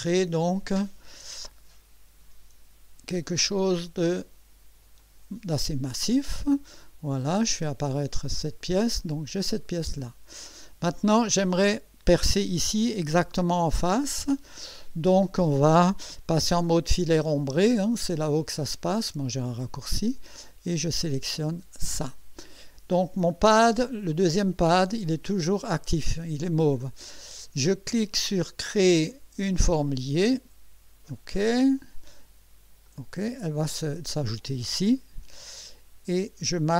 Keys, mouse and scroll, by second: 3.3 KP_0, 5.0 click, 7.1 click, 7.6 space, 8.4 click, 9.0-10.5 drag, 21.4 click, 29.9 click, 31.8 click, 32.8 click.